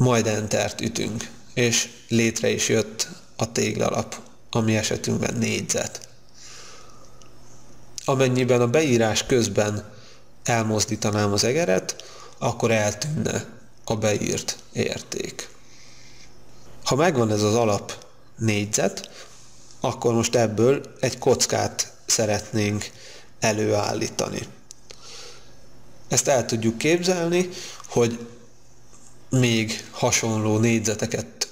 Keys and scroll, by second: 0.5 Return.